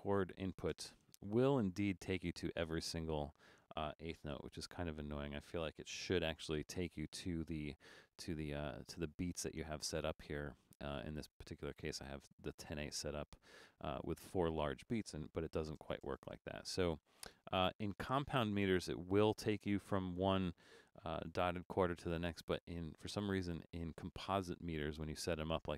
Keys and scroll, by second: 0.7 space, 3.4-4.6 typing, 6.1-6.4 typing, 15.4 shift+a, 15.8 space, 24.4 super+-, 25.0 super+-.